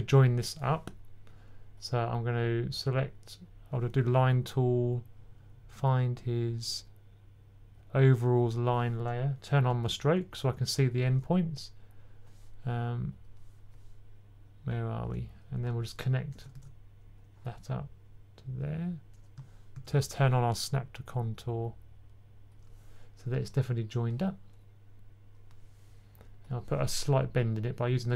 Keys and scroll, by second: 10.0-11.5 typing, 16.4 super+z, 19.2 super+z, 19.6 super+z.